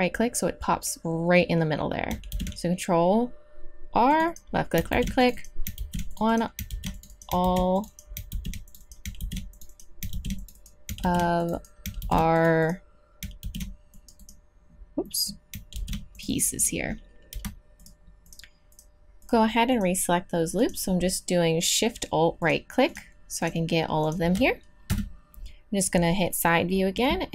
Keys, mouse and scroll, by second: 2.3 ctrl+r, 4.9 ctrl+r, 5.7 ctrl+r, 6.7 ctrl+r, 7.4 ctrl+r, 8.3 ctrl+r, 9.2 ctrl+r, 10.1 ctrl+r, 11.0 ctrl+r, 12.0 ctrl+r, 13.4 ctrl+r, 14.0-15.1 drag, 15.7 ctrl+r, 24.9 KP_3.